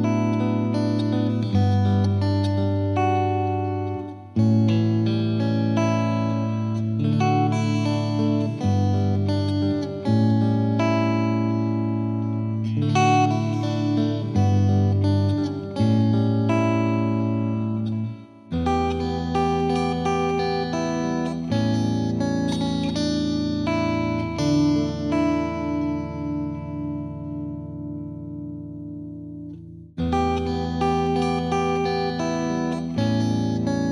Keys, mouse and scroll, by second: 0.9-2.3 drag, 2.3 middle click, 2.6-3.3 right drag, 3.3 scroll down 1, 3.4-4.5 middle drag, 4.5 KP_1, 4.7-5.3 scroll down 2, 4.9 shift+middle drag, 5.3 middle drag, 5.6-6.1 scroll up 2, 5.7 Tab, 6.1 Tab, 6.2-6.8 scroll down 2, 8.7 KP_1, 9.1 g, 10.4 click, 10.8 s, 14.3 z, 14.5-15.4 scroll up 1, 15.4 middle drag, 15.6 z, 15.8-16.3 scroll down 1, 16.3 scroll down 3, 16.4 shift+middle drag, 16.6 scroll up 2, 16.7-17.5 middle drag, 17.5-22.6 drag, 22.6-23.3 scroll down 1, 25.0-25.4 scroll down 3, 25.4 ctrl+a, 26.1 ctrl+a, 26.5-26.8 scroll down 2, 26.8 KP_1, 28.0 shift+a, 28.7 g, 30.3 KP_7, 30.6 s, 33.0-33.9 scroll up 1.